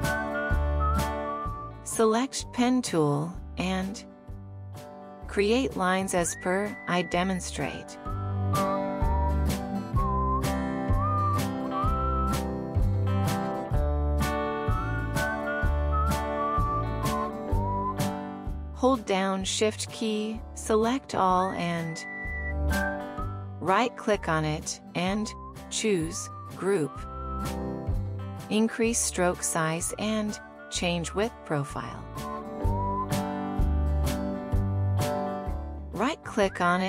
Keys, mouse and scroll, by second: 2.3-3.4 scroll down 2, 3.9-5.2 scroll down 2, 5.2 space, 12.6 ctrl+click, 16.2 ctrl+click, 22.1 Escape, 26.1 shift+click, 27.4 shift+click, 28.4 right click.